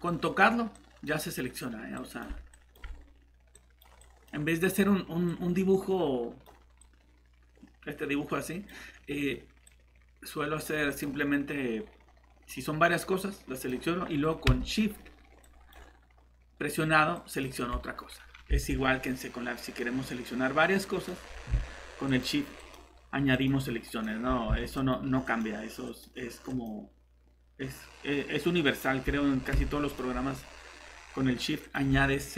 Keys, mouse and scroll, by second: 14.5-15.0 typing, 17.7 typing, 18.6 alt+Tab, 21.2 scroll down 1, 22.0 typing, 22.1 click, 24.0 typing, 24.3 scroll down 1, 24.7 click, 30.3 scroll up 1, 31.6 click.